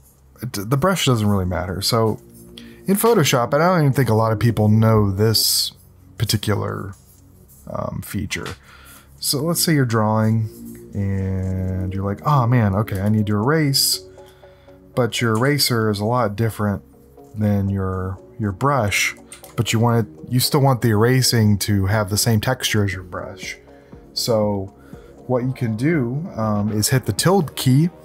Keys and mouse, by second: 15.4 ctrl+z, 19.3 ctrl+z.